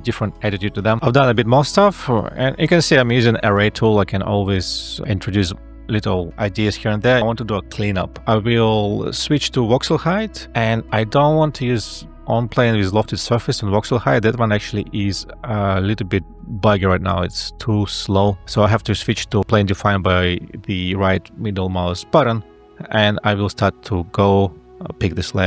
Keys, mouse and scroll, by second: 1.0 alt+F12, 10.5 ctrl+a, 22.5 e, 24.5 a.